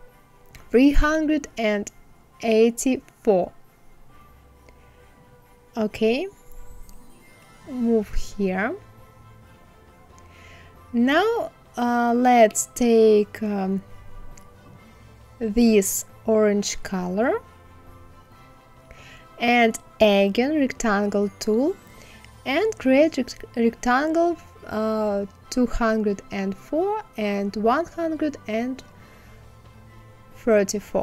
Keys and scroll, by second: 0.1 KP_4, 23.0 KP_1, 23.2 KP_3, 23.5 KP_4.